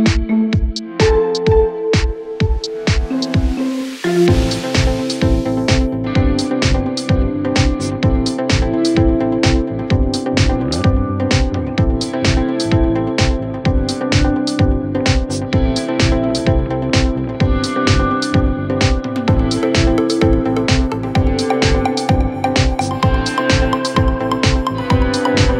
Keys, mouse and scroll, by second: 0.8-1.6 scroll down 15, 1.9 scroll down 5, 2.2-2.6 scroll up 7, 3.3-3.8 scroll down 1, 3.8 scroll down 11, 4.8 space, 5.3 Delete, 5.5 scroll down 3, 5.8 scroll up 7, 7.7 scroll down 10, 9.1 scroll up 2, 11.4 scroll down 1, 15.0-16.4 scroll down 20, 18.2 ctrl+click, 18.3 ctrl+click, 18.6 ctrl+Right, 19.7 typing, 22.0-23.6 typing, 23.7 Return.